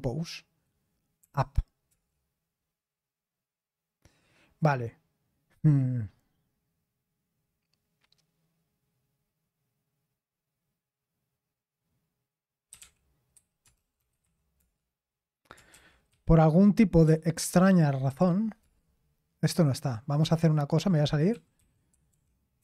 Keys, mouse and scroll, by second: 1.2-1.9 typing, 12.5-14.7 typing, 15.7-17.0 typing, 18.1-18.6 typing, 21.0-22.6 typing.